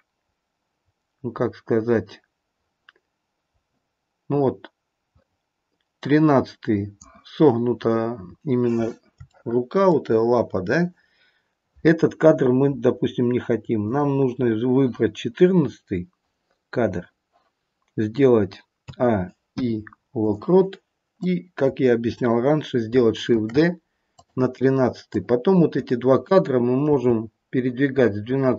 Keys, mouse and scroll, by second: 8.3-9.0 scroll up 3, 9.2 shift+middle click, 13.8 click, 18.8 a, 19.5 i, 21.2 click, 23.3 shift+d, 25.1 click, 27.0 g.